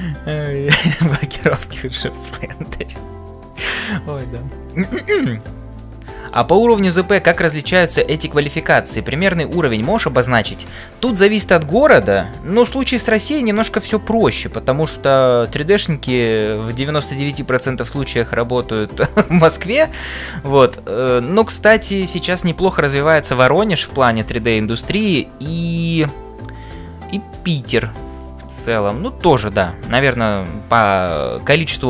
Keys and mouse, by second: 24.0 shift+middle click, 24.6-29.0 middle drag.